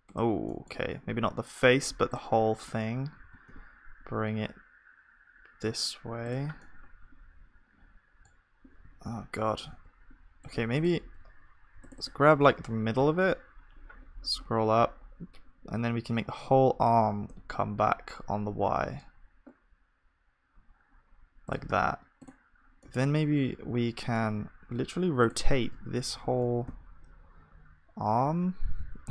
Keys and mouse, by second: 3.2 click, 3.2 g, 9.0 ctrl+z, 9.7 g, 12.4-16.4 drag, 12.4 g, 13.0 g, 22.8-29.1 drag, 22.8-26.1 middle drag, 26.1 r.